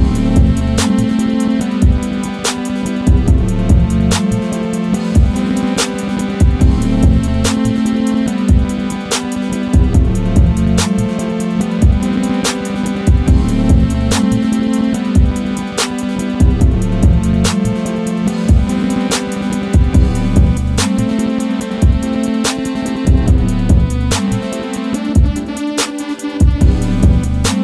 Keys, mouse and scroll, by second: 0.1-3.2 drag, 3.2 right click, 4.5-6.7 drag, 6.7 ctrl+z, 7.6 click, 8.6 right click, 9.4 Left, 10.5-13.8 drag, 13.8 ctrl+z, 14.3-17.3 drag, 17.3 Right, 20.1 Down, 21.0 click, 21.4 scroll down 1, 21.9-24.2 drag.